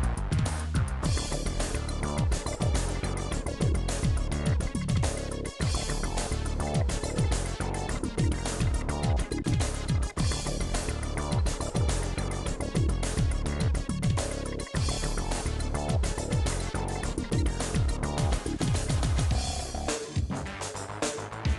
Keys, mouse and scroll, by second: 0.4-1.6 middle drag, 1.6 right click, 2.2 click, 3.0 shift+click, 3.3 right click, 3.7 KP_4, 4.0 click, 4.4 middle click, 5.0-7.8 middle drag, 7.8-9.1 ctrl+z, 9.4-10.6 ctrl+z, 10.8 click, 10.9 middle click, 11.5 click, 11.9 g, 12.3 g, 13.3 shift+click, 13.7 right click, 14.6-15.6 drag, 15.6-16.9 right drag, 16.9 click, 17.5 click, 17.8-18.8 middle drag, 18.8 click, 19.1 2, 19.3 middle click, 19.8 click, 20.2 Delete, 20.7 click, 20.8 Delete, 21.1 click, 21.3 Delete.